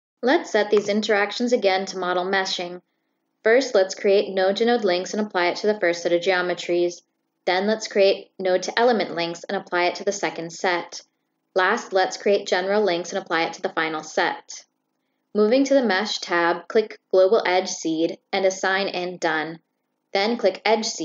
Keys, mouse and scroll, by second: 0.5 click, 2.0 click, 3.5 right click, 5.2 click, 7.5 click, 8.1 click, 8.8 click, 9.6 click, 9.8 right click, 10.5 click, 11.1 click, 12.4 click, 13.4 click, 13.9 click, 14.9 right click, 16.3 click, 17.2 click, 18.5 click, 19.3 click, 20.3 click.